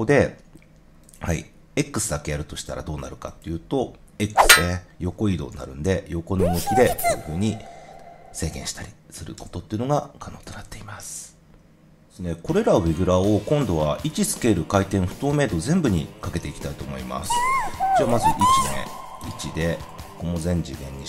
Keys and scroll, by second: 5.4 0, 9.3 0, 10.5 super+z.